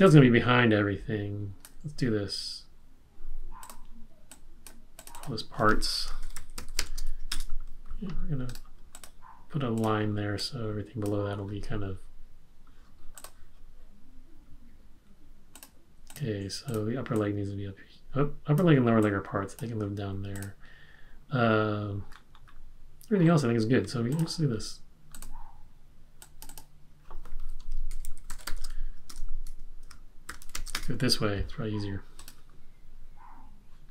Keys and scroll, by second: 6.0-7.2 typing, 7.2 Return, 27.7-31.0 typing.